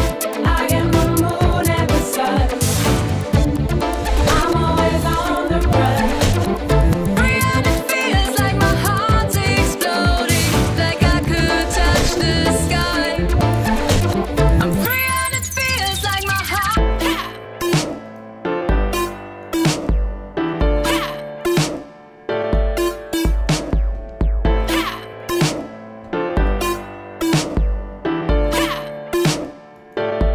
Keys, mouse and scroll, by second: 2.4 click, 6.5 click, 8.2 click, 26.3 click, 29.8 click.